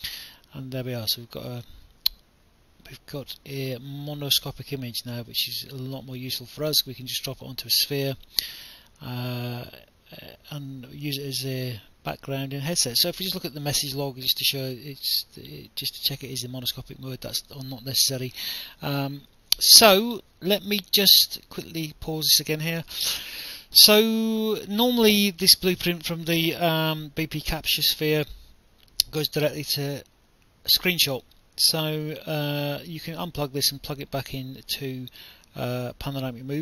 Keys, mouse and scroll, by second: 1.9 click, 5.6 click, 7.2 click, 8.3 right click, 10.8 click, 15.2 click, 17.0 alt+F9, 17.3 right click, 20.2 click.